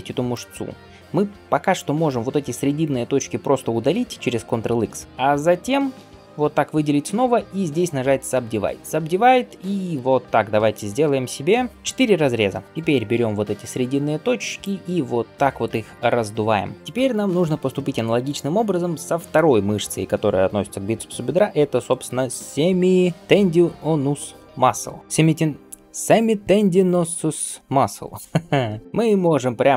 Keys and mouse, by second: 0.6-3.6 middle drag, 4.6 ctrl+x, 4.9-12.8 shift+middle drag, 7.1-12.8 right drag, 8.8-12.8 drag, 13.0 alt+s, 14.6 click, 16.8 click, 29.1 Tab.